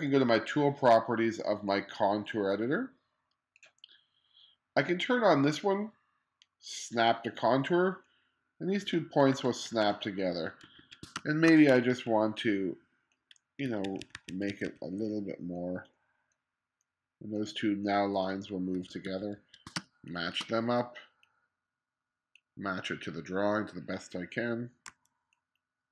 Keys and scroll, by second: 9.4 1, 11.2 space, 12.0 2, 13.9 2, 18.8 1, 19.8 space, 24.9 z.